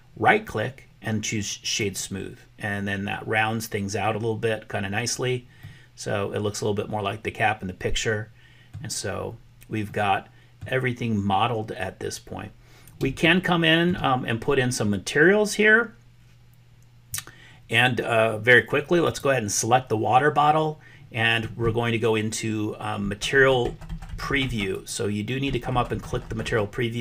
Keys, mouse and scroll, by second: 0.2-2.0 right drag, 5.6-8.8 middle drag, 9.9 middle click, 13.2 shift+middle click, 24.7 click.